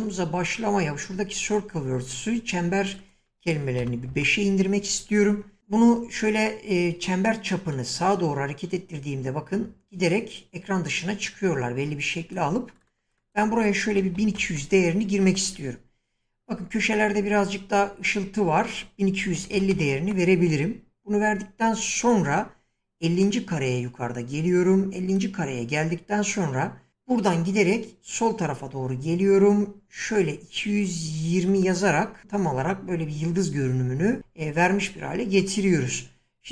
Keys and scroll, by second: 3.8 5, 4.1 Return, 13.7-15.0 typing, 15.2 Return, 19.0-20.2 typing, 32.2 Return.